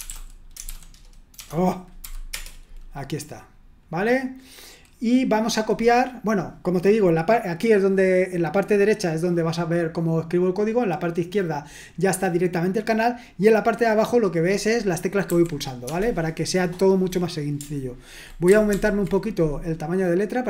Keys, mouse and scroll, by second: 0.0-2.3 typing, 15.3 f, 18.8 ctrl+*.